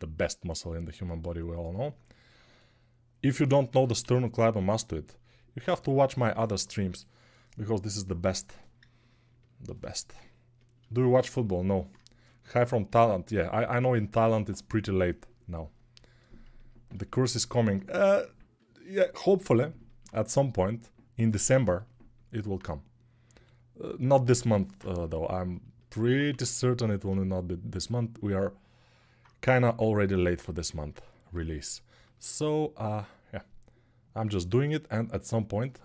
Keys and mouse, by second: 3.8 g, 5.0-35.8 alt+drag, 23.1 g, 26.0 1, 29.3 g.